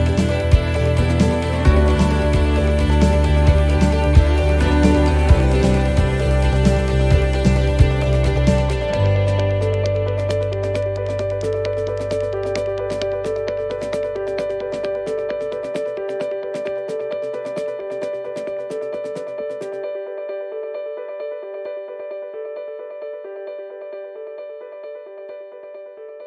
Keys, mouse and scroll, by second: 0.0 middle click, 1.3 click, 3.2 right click, 4.3 right click, 4.8 alt+shift+right click, 5.2 alt+shift+right click, 6.1 click, 7.2 middle click, 12.1 ctrl+z, 12.6 middle click, 13.5 alt+shift+right click, 15.9 click, 18.1 middle click, 22.5 middle click, 25.0 middle click, 25.0 right click, 25.6 alt+shift+right click.